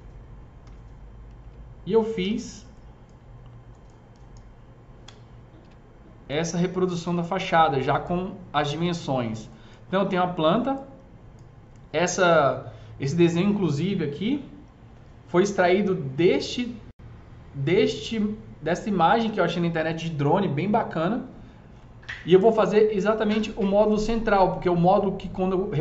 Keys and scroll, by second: 0.6 t, 1.3 z, 2.1 g, 4.9 Delete, 5.5 z.